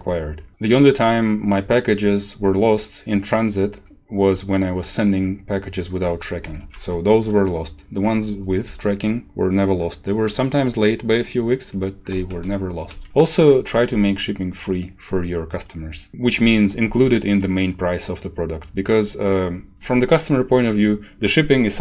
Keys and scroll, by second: 6.6 shift+Home, 7.4 Right, 12.3 ctrl+shift+Right, 16.1 ctrl+shift+Left, 16.9 shift+Left.